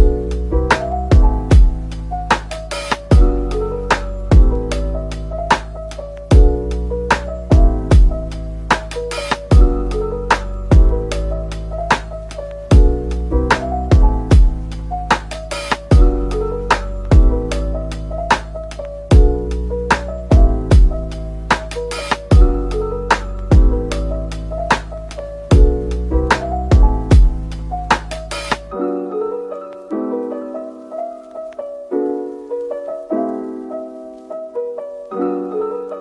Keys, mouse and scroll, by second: 1.8-2.7 typing, 2.8 middle click, 5.0-5.7 typing, 6.6 scroll down 1, 6.8 middle click, 7.4 Tab, 7.7 Tab, 8.6 ctrl+r, 9.4 double click, 9.7 scroll up 1, 10.0 middle click, 12.2 typing, 13.5 typing, 16.9 typing, 20.1 Right, 21.2 ctrl+z, 22.9 typing, 24.6 middle click, 25.8-26.8 typing, 27.6 middle click, 31.0 g, 33.1 middle click.